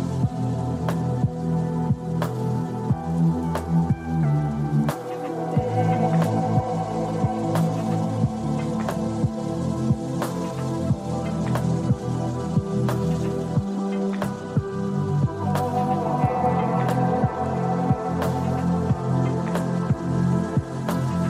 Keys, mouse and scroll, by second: 3.2-4.7 drag, 6.5-7.8 drag, 9.9-11.6 drag, 12.4 click, 15.3-16.6 drag, 17.8 click, 18.7-20.7 drag.